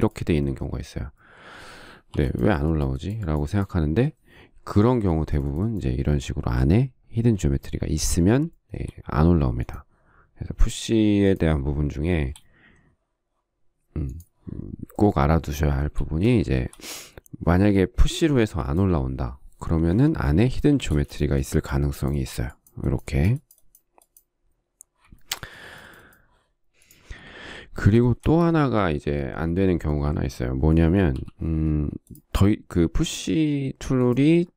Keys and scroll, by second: 2.5 p, 5.1 space, 18.2 p, 20.1 Escape, 21.0 space.